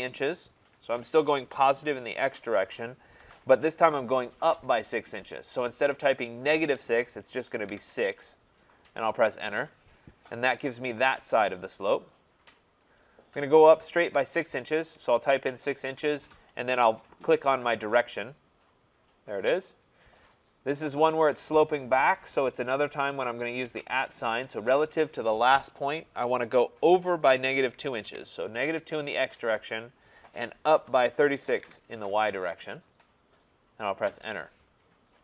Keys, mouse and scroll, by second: 3.2 ,, 7.7 6, 9.6 Return, 14.1-15.5 typing, 15.9 Return, 17.6 click, 23.7 @, 27.4-28.1 typing, 30.6-32.1 typing, 34.1 Return.